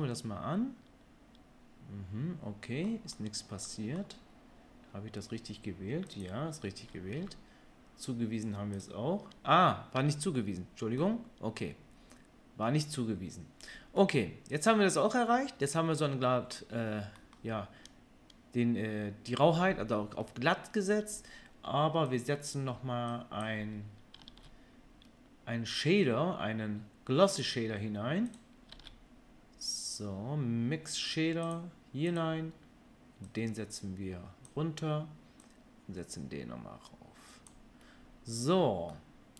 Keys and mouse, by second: 6.4-8.7 middle drag, 7.1 Tab, 8.7-28.4 drag, 10.0 Tab, 24.2 shift+a, 28.4-33.2 middle drag, 28.7 shift+a, 33.2-39.3 drag.